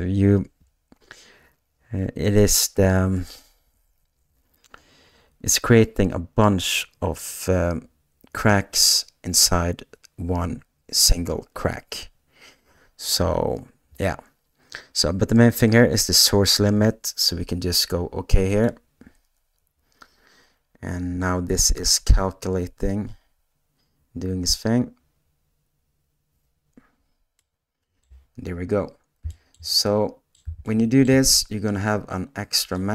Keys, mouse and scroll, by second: 27.3 middle click, 29.3 shift+middle click, 29.8 middle click, 30.6 shift+middle click.